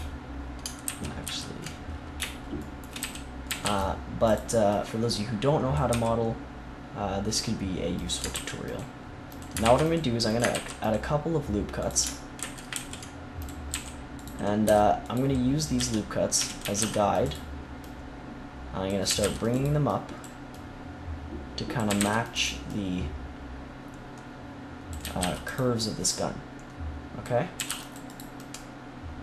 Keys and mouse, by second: 0.8 ctrl+z, 1.2 ctrl+z, 3.0 a, 3.4 a, 3.6 c, 5.8 e, 8.3 ctrl+r, 9.6 ctrl+r, 10.5 ctrl+r, 12.3 ctrl+z, 12.7 ctrl+r, 14.2-16.7 drag, 14.6 c, 15.7 z, 16.3 z, 16.6 a, 16.7 c, 19.0 a, 19.2 c, 19.9 click, 21.8 a, 21.9 c, 25.0 a, 25.3 c, 25.7-27.5 drag, 27.5 a, 27.6 c, 28.1-29.2 drag.